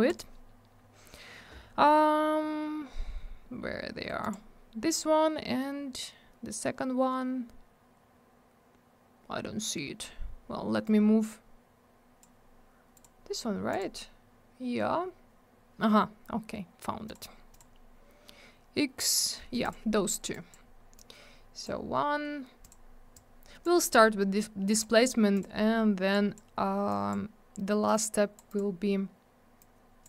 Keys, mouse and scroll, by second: 0.1 click, 0.1 click, 4.2 click, 4.3 click, 10.8 click, 12.9 click, 13.0 click, 13.7 click, 13.8 click, 17.0 click, 17.1 click, 17.5 click, 17.6 double click, 19.6 click, 19.7 click, 20.3 click, 20.9 click, 22.6 click, 22.7 click, 23.1 click, 24.7 click, 24.8 click, 25.3 click, 25.4 click, 26.1 click, 26.9 click, 27.8 click, 28.5 click, 28.5 click, 29.6 click.